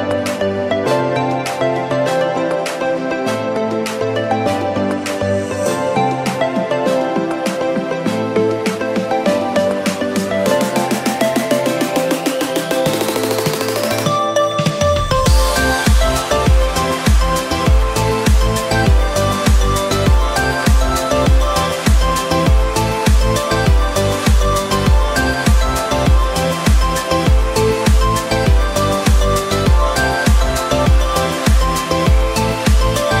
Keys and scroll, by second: 21.7 p, 24.1 F9.